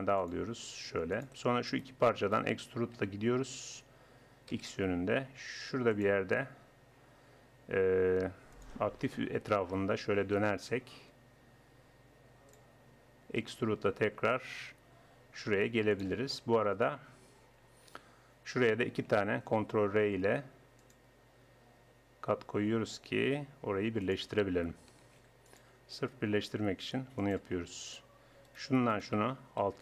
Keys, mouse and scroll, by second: 1.7-4.2 drag, 3.0 e, 8.5-10.0 drag, 10.0 r, 13.4 e, 16.3 middle click, 19.5 ctrl+r, 25.1 ctrl+r, 27.5 click, 27.7 click, 28.5-29.8 drag.